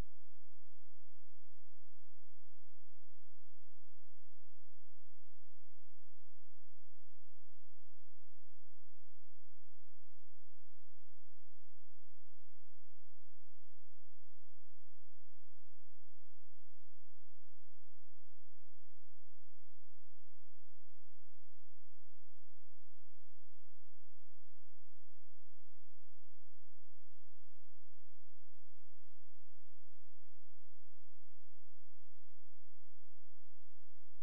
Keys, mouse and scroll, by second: 14.6 space, 15.4 click, 28.3 click.